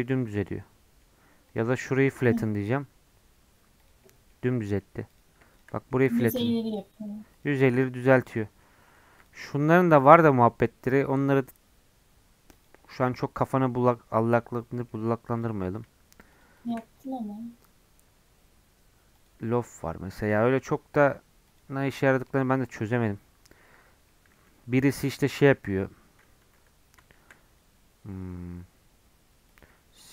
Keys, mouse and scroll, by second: 1.5 shift+click, 2.3-4.0 right drag, 4.0-5.1 middle drag, 5.1 click, 5.7 middle click, 6.0-7.9 right drag, 7.9-9.1 middle drag, 9.2-10.2 drag, 10.2-12.9 right drag, 12.9-15.3 middle drag, 15.3-17.0 drag, 17.0-24.1 right drag, 24.1-26.3 middle drag, 26.3 scroll down 1, 26.4 Tab, 26.8-27.1 scroll down 2, 27.1 shift+a.